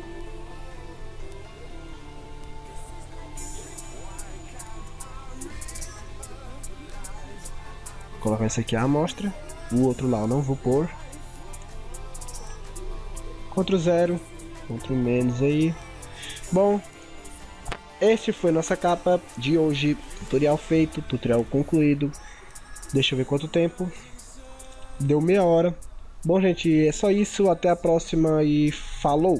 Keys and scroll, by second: 13.4 ctrl+0, 13.6 ctrl+=, 14.2 ctrl+0, 14.5 ctrl+=, 15.5 ctrl+-, 15.8 ctrl+0.